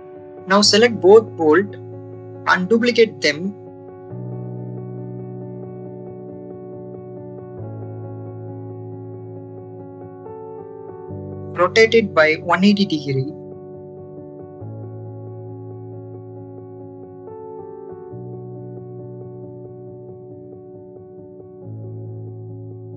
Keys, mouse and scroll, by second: 0.2 click, 0.5 click, 0.7 click, 1.3 a, 2.5 shift+d, 2.7 right click, 3.3 click, 4.9 shift+middle click, 7.4 r, 9.0 z, 10.0 9, 10.2 0, 11.7 1, 12.2 8, 12.3 0, 12.9 click, 13.7-15.1 drag, 15.7 shift+middle click, 16.8 middle click, 18.3-22.3 drag.